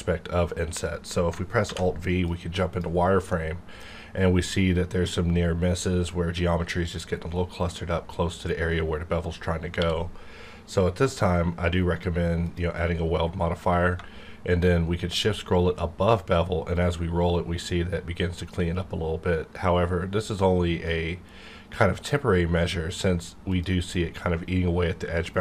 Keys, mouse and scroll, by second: 1.3 alt+Num_Lock, 1.3 shift+click, 1.6 alt+v, 2.2 click, 3.3 middle click, 3.9-5.3 scroll up 1, 7.2-9.0 scroll down 1, 9.8 q, 12.4 click, 14.6-15.2 shift+scroll up 1, 16.1 scroll up 1, 16.6-17.3 scroll up 1, 17.3-18.2 scroll down 1, 18.2-19.0 scroll down 1, 19.0 scroll down 1, 23.4 click.